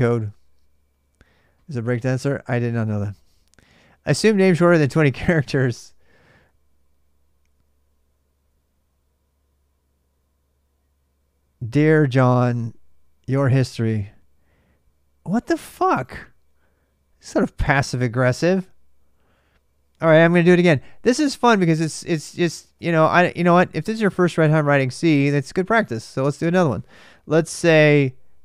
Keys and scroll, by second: 22.7-25.4 typing, 27.3 super+Tab.